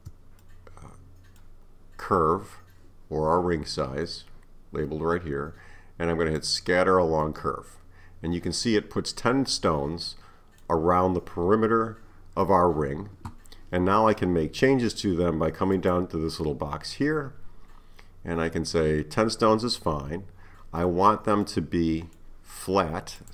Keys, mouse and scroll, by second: 0.4-3.4 middle drag, 6.4-7.2 drag, 7.2-10.3 middle drag, 15.8 click, 20.8-23.2 middle drag, 23.2-23.3 drag.